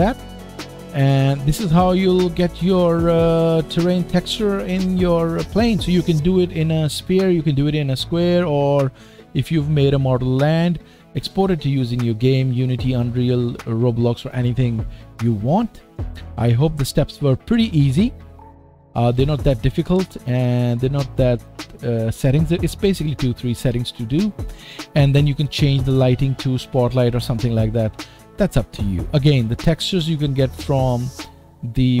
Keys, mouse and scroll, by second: 0.0-21.5 drag, 19.3 KP_0, 20.0 scroll down 1, 20.4-20.7 scroll up 3, 21.5-32.0 middle drag.